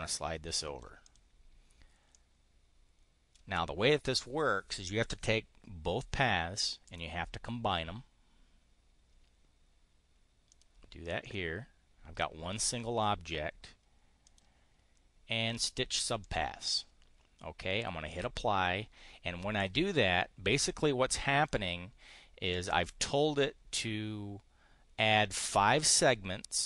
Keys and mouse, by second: 0.9 click, 2.0-3.3 drag, 6.8 click, 10.5 click, 11.1 click, 12.0-13.1 drag, 14.2 click, 16.2 click, 18.1 click, 20.6 click.